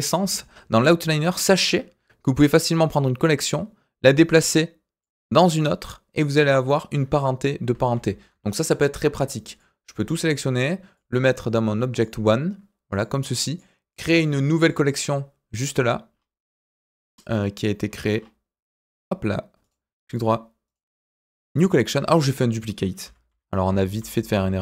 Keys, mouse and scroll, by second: 1.2 click, 3.3 click, 7.9 ctrl+z, 8.7 click, 9.5 shift+click, 10.9 click, 12.9 click, 13.5 click, 13.9 click, 14.1 right click, 16.1-16.6 scroll down 2, 16.9-17.7 scroll up 1, 17.9-18.7 scroll up 3, 18.7 click, 19.6 right click, 20.6-21.5 right drag, 23.0 ctrl+z, 23.3 ctrl+z, 24.0 ctrl+z, 24.3 ctrl+z.